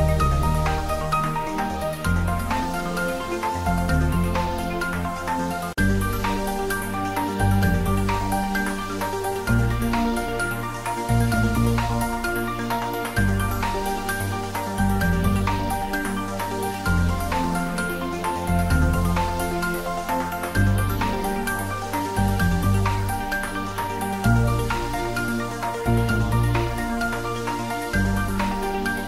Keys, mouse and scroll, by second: 0.0 click, 0.3 scroll up 1, 0.6 middle click, 1.4 ctrl+r, 2.3 ctrl+3, 2.9 click, 3.3 x, 3.5 click, 6.4 scroll down 1, 6.6 middle click, 7.3 scroll down 1, 7.7-9.7 middle drag, 9.7 click, 10.2 middle click, 10.8 g, 11.8 click, 12.3 ctrl+z, 12.6 scroll down 1, 12.8 middle click, 13.1-13.4 scroll up 1, 13.4 middle click, 14.3 click, 14.9 space, 17.4 middle click, 17.4 middle click, 18.0 scroll up 1, 18.2 middle click, 19.2-19.6 scroll down 1, 19.6 middle click, 20.0 space, 22.9 ctrl+Num_Lock, 22.9 scroll up 1, 23.0 ctrl+z, 23.7 click, 26.3 shift+click, 27.9 shift+click.